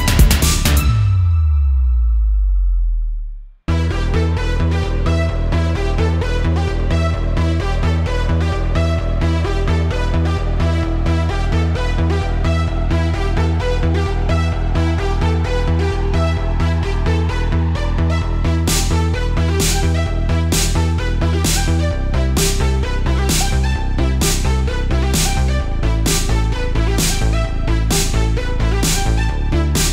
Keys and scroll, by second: 0.5 super+z, 1.6 space, 2.0 super+z, 3.0 space, 3.8 super+z, 4.5 space, 5.0 super+z, 5.6 space, 6.3 super+z, 7.3 super+z, 7.8 super+z, 8.9 space, 9.1 super+z, 9.8 super+z, 10.5 super+z, 12.0 super+z, 12.5 super+z, 12.7 super+z, 13.2 super+z, 14.3 super+z, 15.5 super+z, 15.9 super+z, 16.2 super+z, 17.1 super+z, 19.2 super+z, 20.1 space, 20.8 super+space, 21.2 super+space, 22.8 space, 23.4 space, 26.4 super+z, 27.9 super+z, 28.9 super+space, 29.1 super+space, 29.2 super+space.